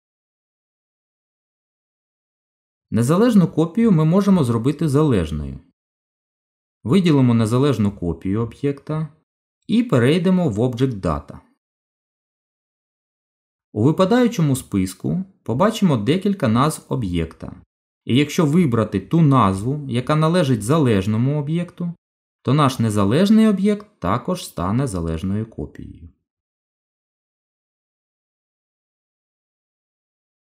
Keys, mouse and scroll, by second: 0.6 ctrl+z, 1.3 ctrl+z, 2.5 Tab, 8.8 click, 12.1 click, 15.7 click, 23.0 Tab, 25.4 click, 27.2 click, 28.6 g.